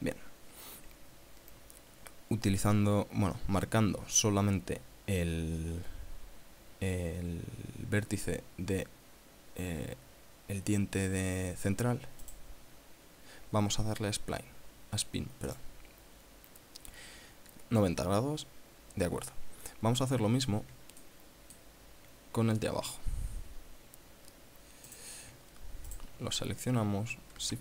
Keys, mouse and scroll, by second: 5.3 scroll down 1, 11.5-11.9 scroll up 1, 12.6 right click, 13.1 scroll up 1, 15.9 click, 18.7-19.3 scroll down 2, 21.4-22.2 shift+middle drag, 22.4 shift+scroll up 1, 22.9 shift+scroll down 1, 23.5-24.8 scroll up 6, 25.3 right click, 26.3 shift+right click.